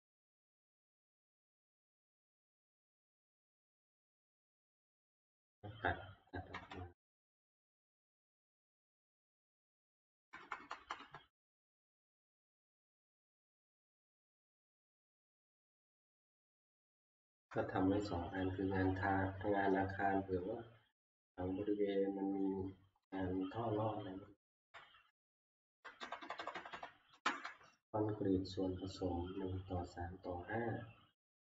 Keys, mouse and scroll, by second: 5.5-7.7 scroll up 12, 7.7 Right, 9.9 Down, 10.2 Left, 10.4 Left, 10.6 Left, 10.8 Left, 11.0 Left, 11.9 ctrl+x, 14.5 Down, 14.9 Left, 15.1 Left, 15.3 Left, 15.5 Left, 21.4 Left, 24.5 ctrl+v, 26.0 Right, 26.2 Right, 26.4 Right, 26.5 Right, 26.7 Right, 27.1 Delete, 29.3 Down, 31.3-31.5 Right.